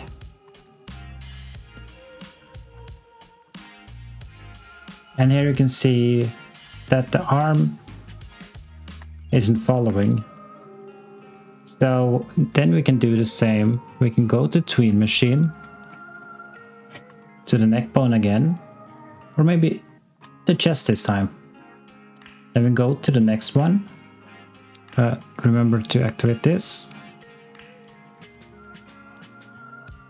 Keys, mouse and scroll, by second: 0.3 x, 1.2 click, 3.8 alt+click, 8.4 alt+click, 9.7 click, 10.7 click, 13.5-15.6 scroll down 1, 15.6 scroll up 1, 17.1 alt+click, 19.5 click, 20.3 alt+click.